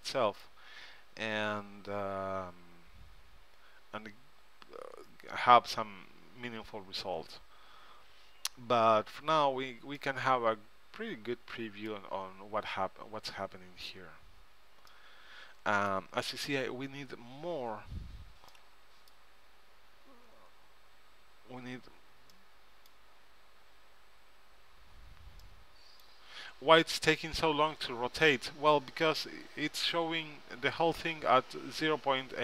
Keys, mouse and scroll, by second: 1.7-2.9 middle drag, 12.4-13.6 middle drag, 17.2-18.3 middle drag, 20.7-21.8 middle drag, 23.8-25.4 middle drag, 27.7-28.9 middle drag.